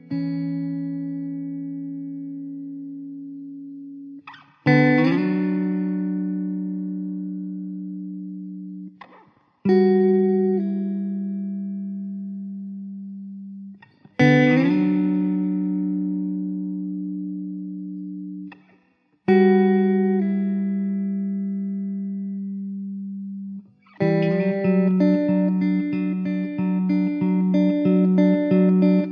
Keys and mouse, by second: 1.2 alt+w, 2.0 alt+middle click, 3.6 alt+middle click, 6.2 middle click, 8.2 middle click, 12.6 middle click, 13.5 alt+w, 19.6 middle click, 23.6 alt+w, 24.3 alt+middle click, 26.5 m.